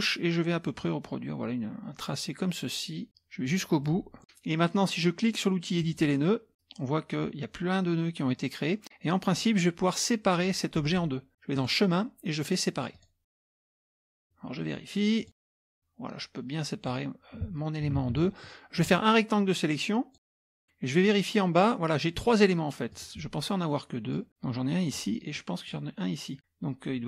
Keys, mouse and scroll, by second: 3.7-4.2 scroll down 2, 5.8 click, 11.6 click, 12.9 click, 15.2 click, 15.7-17.4 drag, 18.1 ctrl+z, 18.9-20.5 drag, 22.9 click, 24.1-25.2 drag, 25.4 click.